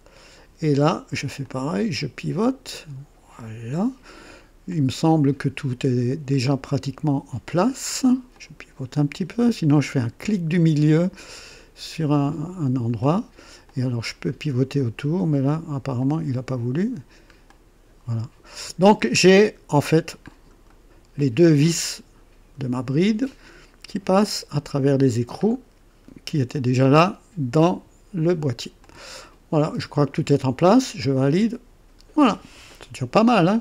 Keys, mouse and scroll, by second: 1.4-4.2 drag, 4.7-7.3 drag, 7.4-8.1 drag, 8.3-9.3 drag, 11.3 middle click, 12.8 middle click, 13.6-14.8 drag, 15.9 click, 17.4-19.0 drag, 19.1 scroll up 1, 20.2-20.5 scroll up 1, 20.7 right click, 25.4-26.1 scroll down 4, 28.8-30.2 drag, 31.1 click, 31.9-32.2 scroll down 1, 32.7-33.6 drag.